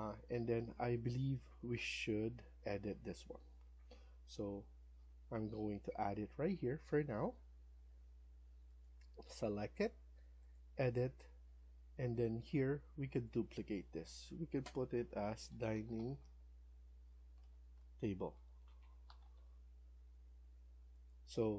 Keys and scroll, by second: 6.1 Escape, 6.5 Escape, 15.1-19.6 typing.